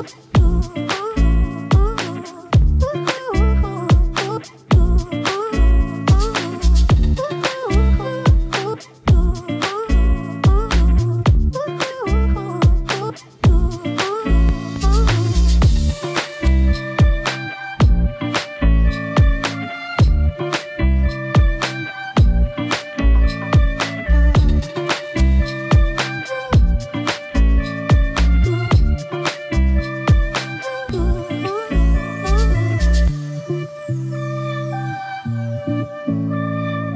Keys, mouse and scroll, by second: 2.4 click, 3.6 click, 6.1 click, 6.8 click, 7.8 click, 9.2-10.8 drag, 17.1-18.5 drag, 21.0-22.7 drag, 27.7-29.3 drag, 30.5 2, 30.7-33.0 drag, 35.3 click, 36.5 click.